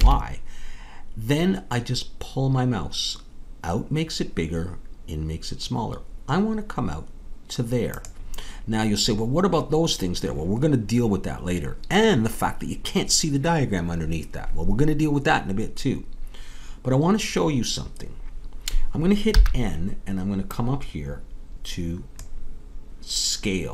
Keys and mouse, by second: 19.3 n.